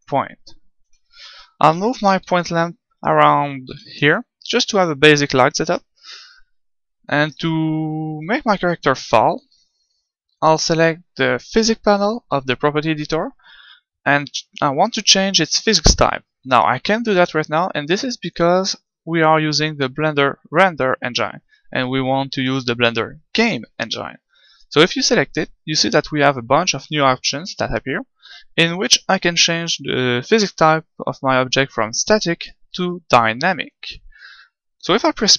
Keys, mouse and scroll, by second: 0.8 KP_7, 1.9 g, 3.2-5.0 drag, 3.6 KP_1, 4.4 g, 5.7-7.7 drag, 7.2-9.1 right drag.